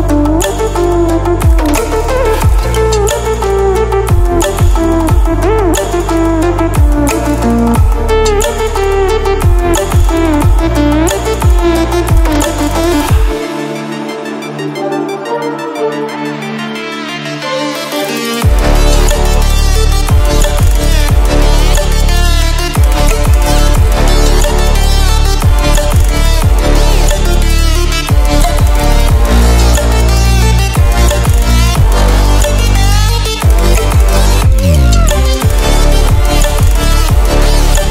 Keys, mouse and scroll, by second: 9.4 ctrl+alt+scroll down 1, 10.4 ctrl+alt+scroll down 1, 11.5 ctrl+alt+scroll up 1, 12.8 ctrl+alt+scroll down 1, 13.2 ctrl+alt+scroll up 1, 14.8 click, 26.9 click, 33.4 ctrl+alt+scroll up 1, 36.1-37.9 drag.